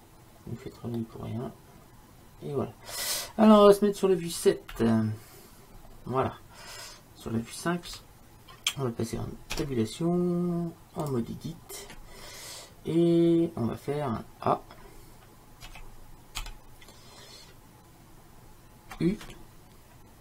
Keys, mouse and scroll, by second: 1.3-3.1 middle drag, 4.8 KP_7, 5.9-8.0 middle drag, 8.0 KP_5, 9.6 Tab, 13.7-15.8 middle drag, 15.8 a, 16.5 a.